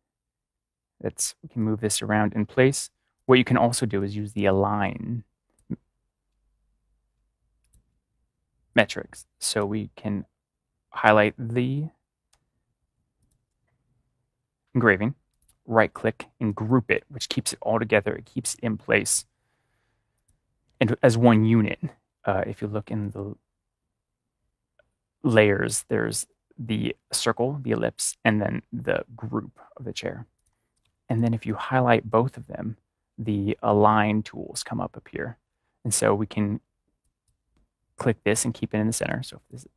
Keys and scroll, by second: 12.3 BackSpace.